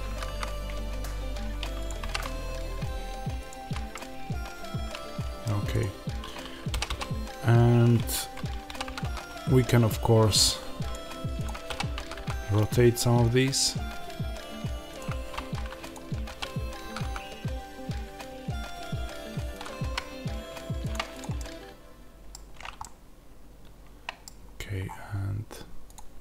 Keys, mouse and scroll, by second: 1.7 click, 3.4 click, 3.9-5.7 middle drag, 5.7 click, 6.6 r, 8.0 Escape, 8.5 r, 10.2 click, 11.6 r, 14.8 click, 16.2 r, 19.5 click, 19.7 g, 20.8 click, 21.2-25.8 middle drag, 22.2-22.6 scroll down 2, 24.1-24.7 scroll down 2, 24.7-25.2 scroll up 2, 25.2-25.8 scroll up 1, 25.8 click, 26.1 middle click.